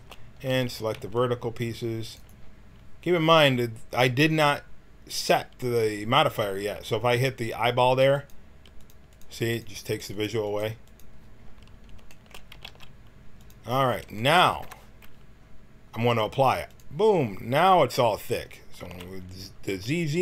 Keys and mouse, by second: 0.4 a, 0.9 c, 2.8 middle click, 3.9 middle click, 8.1-12.5 drag, 12.5 g, 14.7 Tab, 16.6-18.8 drag, 18.8 z, 19.7 a.